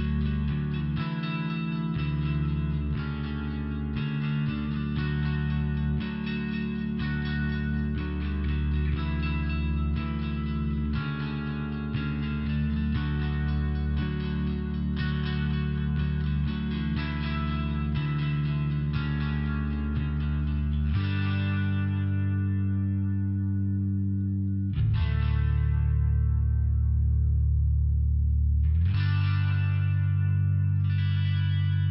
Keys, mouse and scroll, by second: 0.2 click, 0.9 click, 1.0 click, 2.6 click, 2.7 click, 4.3 click, 4.3 click, 4.5 click, 4.6 click, 7.7 click, 7.9 click, 9.2 click, 9.3 click, 10.3 click, 10.4 click, 11.8 click, 11.8 click, 13.2 click, 13.3 click, 13.6-14.9 typing, 13.8 click, 17.3 click, 17.5 ], 17.6 click, 18.6 click, 19.3 click, 19.5 click, 19.9 click, 20.0 click, 20.5 click, 20.7 click, 21.2 click, 21.3 click, 21.7 click, 22.3 click, 22.4 click, 22.9 click, 23.0 click, 23.6 click, 23.7 click, 24.1 click, 24.2 click, 24.7 click, 25.5 click, 25.7 click, 26.2 click, 26.3 click, 26.6 click, 26.8 click, 27.2 click, 27.2 click, 27.8 click, 28.2 click, 28.2 click, 28.4 click, 28.8 click, 29.0 click, 29.4 click, 29.5 click, 30.0 click, 30.2 click, 30.6 click, 30.8 click, 31.3 click, 31.4 click, 31.8 click.